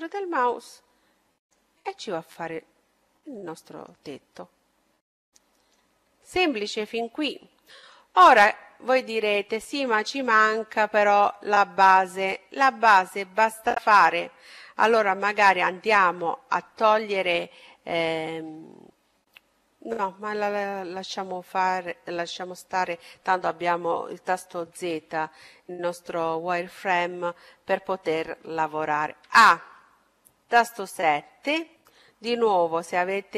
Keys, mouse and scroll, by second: 2.0-3.8 middle drag, 4.3-6.1 middle drag, 6.7-8.5 middle drag, 9.0-10.8 drag, 10.3-12.3 middle drag, 14.9-16.5 right drag, 17.7-19.8 middle drag, 24.7 z, 28.9 a, 30.6 KP_7.